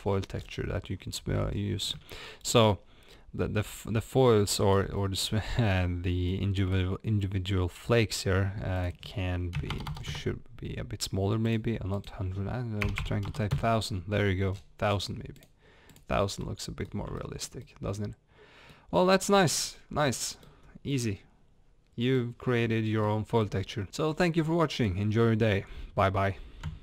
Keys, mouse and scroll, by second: 2.7-3.1 scroll up 2, 3.1 scroll down 2, 3.5-10.1 middle drag, 3.5-4.2 scroll up 2, 5.0-5.5 scroll up 1, 5.9-6.3 scroll down 1, 10.1-15.4 drag, 10.1 KP_0, 10.2 KP_Enter, 13.5 BackSpace, 13.6 KP_Enter, 14.5 scroll down 1, 16.4-26.8 middle drag, 19.0 scroll down 1, 19.6 scroll up 1, 20.7 scroll up 1.